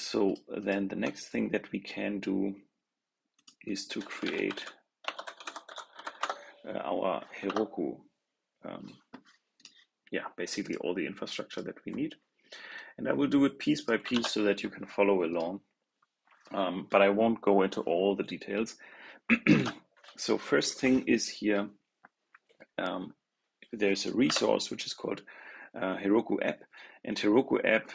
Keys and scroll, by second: 14.0 super+c, 19.4 super+v.